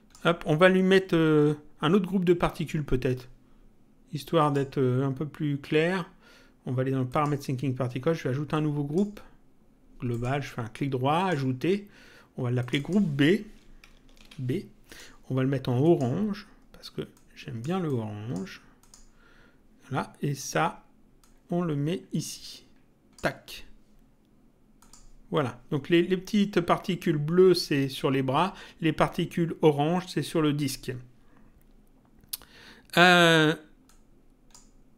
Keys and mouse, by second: 4.4 click, 7.1 click, 8.5 click, 10.1 right click, 11.2 click, 12.6 click, 14.1 shift+b, 14.9 click, 17.1 click, 21.2 click, 24.7 click, 33.9 click.